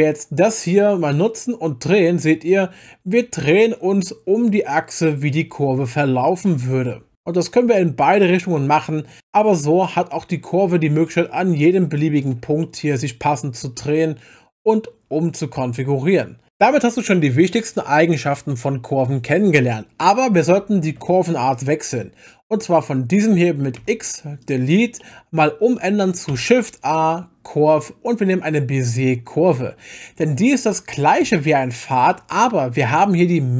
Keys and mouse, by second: 0.4-9.2 drag, 9.2-11.3 middle drag, 12.2 click, 12.6 middle click, 12.6 click, 12.7 middle click, 14.5-16.1 drag, 20.8 Tab, 21.9 click, 23.8 x, 25.0-25.3 middle drag, 26.3 shift+a, 30.5 middle click, 31.5 shift+click.